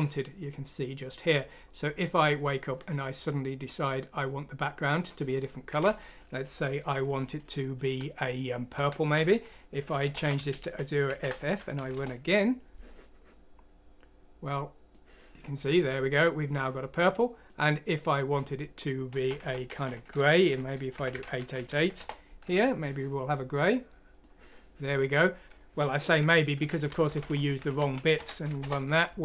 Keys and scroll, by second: 7.8 Right, 8.7 Right, 10.0-13.6 typing, 11.9 Return, 19.1-21.1 typing, 21.7 F6, 21.9 Return, 23.2-24.0 typing, 25.4 typing, 26.7-28.5 typing, 28.6 Return.